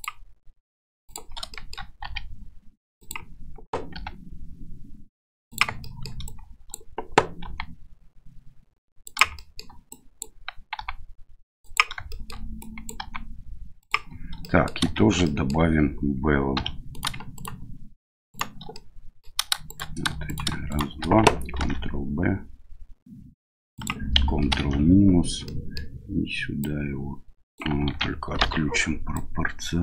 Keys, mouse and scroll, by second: 1.5 shift+middle click, 2.0 r, 3.9 g, 5.9 shift+middle click, 6.3 click, 7.4 g, 9.4 click, 10.0 click, 10.8 g, 12.1 middle click, 12.6 click, 13.0 g, 14.5 middle click, 15.0 shift+z, 15.3 click, 16.6 2, 16.9 right click, 17.3 shift+right click, 18.3 shift+right click, 18.7 middle click, 19.7 shift+right click, 20.3 right click, 20.7 shift+right click, 21.6 ctrl+b, 25.4 middle click, 26.6 click, 27.9 ctrl+z, 28.4 o, 29.1-29.8 drag.